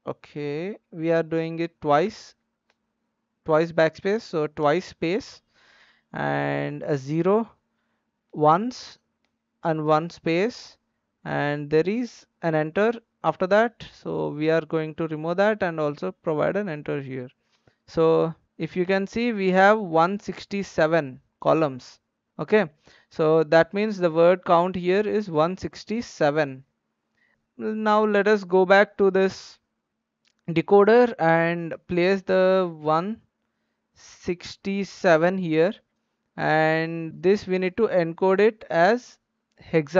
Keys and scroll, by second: 0.3 Right, 2.0 BackSpace, 2.6 BackSpace, 4.1 space, 4.6 space, 13.2 BackSpace, 33.9-35.4 typing.